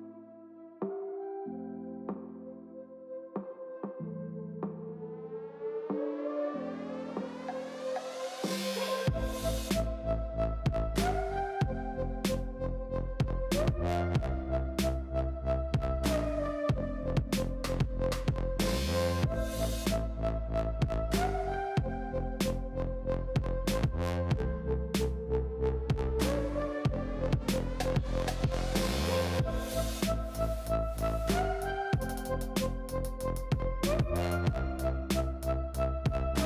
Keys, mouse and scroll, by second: 0.8 ., 1.6 ,, 2.3 g, 3.0 shift+middle click, 3.2 scroll up 5, 3.5 shift+middle click, 3.8 g, 5.5 shift+middle click, 6.3 g, 8.0 scroll down 4, 8.2-8.8 middle drag, 8.8 click, 9.0 Tab, 9.2 click, 9.3-10.8 middle drag, 10.8 click, 11.0 Tab, 11.1 middle click, 11.6 click, 11.9 Tab, 12.1 middle click, 12.3 alt+z, 12.9 click, 13.3 g, 14.9 click, 15.4 g, 16.5 x, 17.6 click, 17.9 click, 18.1 Tab, 18.3 click, 18.7 alt+z, 18.8-19.6 middle drag, 19.6 scroll down 2, 19.8-22.6 middle drag, 22.6 click, 22.8 Tab, 23.0 shift+middle click, 23.1 scroll up 2, 23.3 alt+z, 23.9 click, 24.6 alt+click, 25.4 Tab, 26.0 Tab, 26.2 alt+z, 26.6 g, 28.0 shift+click, 29.4 alt+shift+click, 29.9 g, 31.5 scroll down 2, 31.6 click, 31.6 middle click, 31.8 Tab, 32.3-33.2 drag, 32.3 middle click, 33.2 shift+middle drag, 33.5-34.4 scroll down 2, 34.4 click, 35.1 Tab, 35.4-36.4 shift+middle drag.